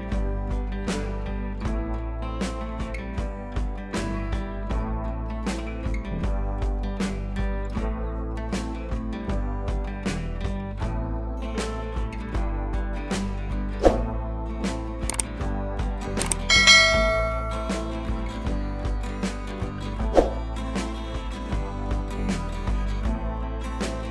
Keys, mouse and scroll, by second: 0.7-1.1 shift+click, 1.6 click, 2.2-2.6 shift+click, 3.7 Down, 6.8 click, 7.8-8.3 scroll up 2, 8.9 click, 9.4 shift+click, 10.8 ctrl+z, 12.5 click, 13.3 shift+click, 14.3 click, 15.0 ctrl+z, 15.5 click, 16.3 ctrl+[, 17.1 click, 19.3-19.9 shift+click, 21.5 ctrl+z, 22.3 ctrl+z, 23.2-24.1 drag.